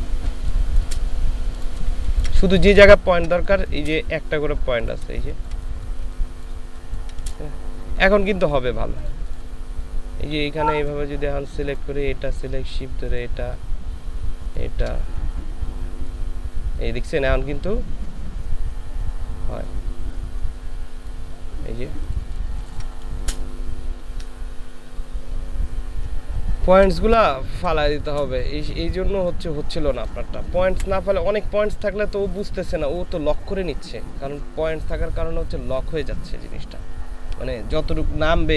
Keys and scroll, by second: 0.4 space, 1.9 ctrl+space, 2.7 ctrl+space, 6.0 ctrl+space, 22.5 ctrl+space, 26.7 ctrl+space, 27.3 ctrl+space, 30.8 Delete, 32.9 Delete.